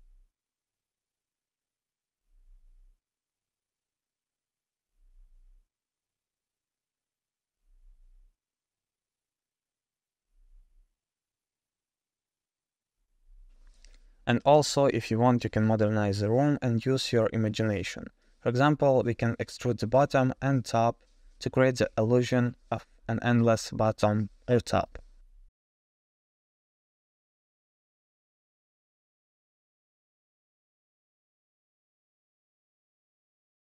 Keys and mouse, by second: 2.6 click, 3.0 click, 4.4 click, 4.6-7.2 drag, 6.0 o, 10.0 click, 11.2 click, 19.0 Tab, 20.1 3, 20.5 click, 22.3 e, 27.4 KP_0, 27.6 drag, 28.1 e, 29.1 s, 30.4 middle click, 31.0 g, 32.2 middle click, 32.6 shift+middle click, 32.8 middle click, 33.7 s.